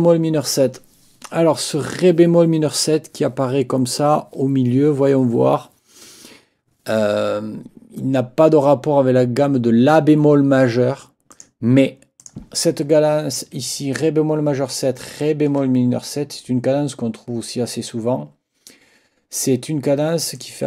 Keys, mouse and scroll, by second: 11.3 click, 12.2 click, 14.7 ctrl+click, 20.4 click.